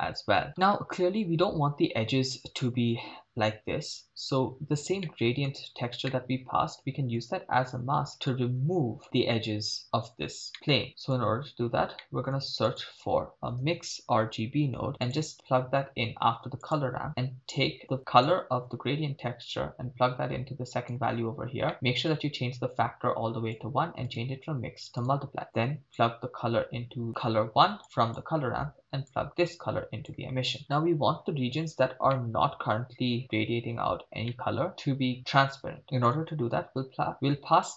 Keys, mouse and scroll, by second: 5.0 middle click, 5.7-6.0 scroll down 2, 6.1-7.2 middle drag, 7.2-8.3 scroll down 4, 8.3-9.0 drag, 9.0 middle click, 9.6-10.1 scroll up 1, 10.5 middle click, 10.9 click, 12.0 shift+middle click, 12.4 shift+a, 17.1 middle click, 18.3-20.9 drag, 21.3-22.0 scroll up 6, 21.7 middle click, 22.8-23.7 drag, 24.1-25.2 drag, 26.0-27.1 drag, 27.8 click, 29.1-30.3 drag, 32.2-33.1 middle drag, 34.4-34.7 middle drag, 35.8 middle click.